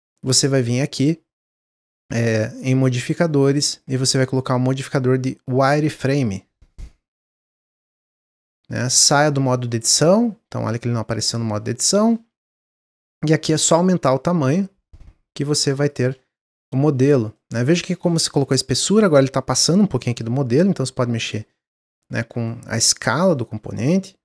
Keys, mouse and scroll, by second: 2.6-3.6 drag, 6.2 click, 7.9 Tab, 8.2-11.2 middle drag, 12.8-15.9 shift+drag, 16.1-17.5 middle drag, 17.5-18.8 scroll up 3, 18.8 click, 20.0 click, 21.4 middle click, 21.7 Tab, 21.9 scroll down 1, 22.2-24.2 middle drag.